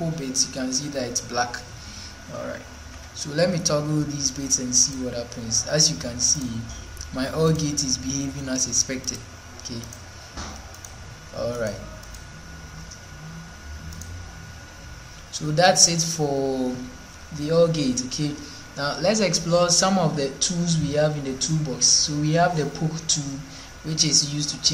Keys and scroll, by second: 2.7 ctrl+1.